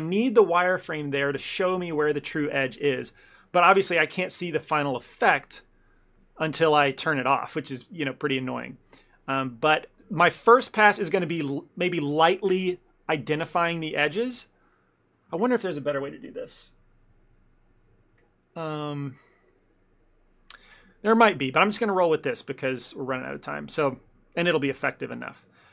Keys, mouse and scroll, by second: 5.6 click, 7.5 middle click, 8.1 middle click, 10.4 ctrl+middle click, 10.5 ctrl+middle click, 25.5 click.